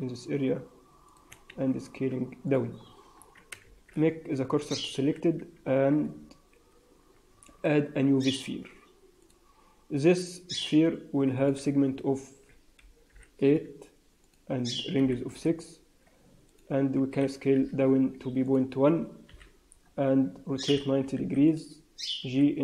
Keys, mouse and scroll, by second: 1.4 s, 2.6 Tab, 2.7 scroll down 3, 3.1 Tab, 3.5 shift+s, 4.9 Tab, 5.3 Tab, 6.0 a, 7.3 shift+a, 11.3 click, 13.5 ], 14.1 click, 16.4 click, 17.0 s, 19.2 KP_3, 19.7-20.6 scroll up 4, 20.6 r, 22.1 g.